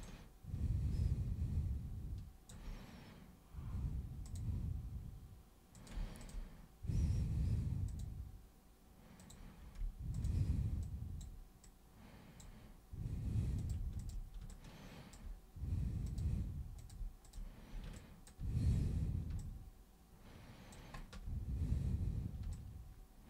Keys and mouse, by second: 0.0-2.4 alt+super+drag, 4.3 super+click, 5.7 super+click, 6.2 shift+click, 7.8 click, 9.1 click, 10.1 shift+click, 10.8 click, 11.6 click, 13.6 click, 14.0 shift+super+click, 14.4 alt+super+click, 16.0 super+click, 16.8 super+click, 17.2 shift+super+click, 17.9 alt+super+click, 19.4-20.9 alt+drag, 22.5-23.2 alt+drag.